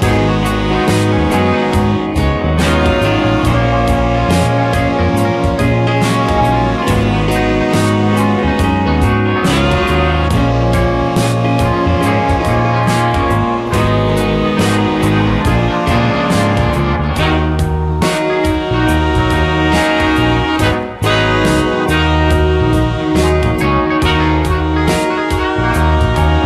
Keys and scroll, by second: 3.1 space, 4.9 space, 8.8 ctrl+z, 14.4 space, 22.0 space.